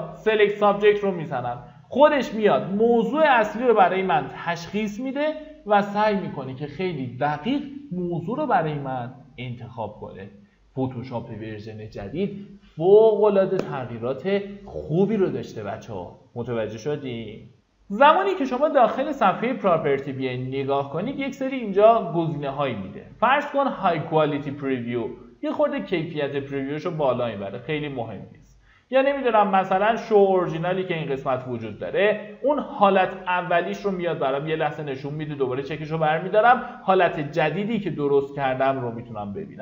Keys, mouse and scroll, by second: 23.8 click.